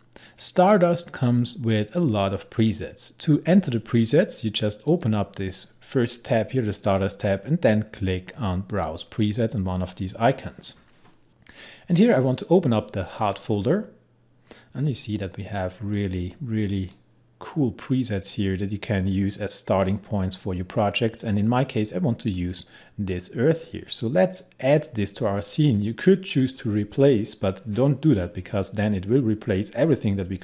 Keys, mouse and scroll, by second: 0.8-4.9 drag, 4.9 click, 8.9 click, 11.3 click, 13.3-22.4 drag.